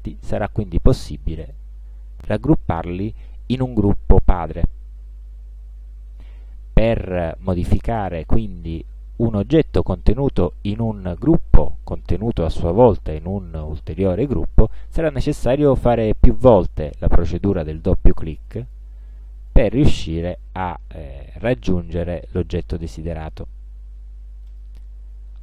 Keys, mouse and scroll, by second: 1.5 right click, 3.9 click, 6.3 click, 16.3 click, 18.6 click, 19.6 click, 20.3 click, 24.6 click.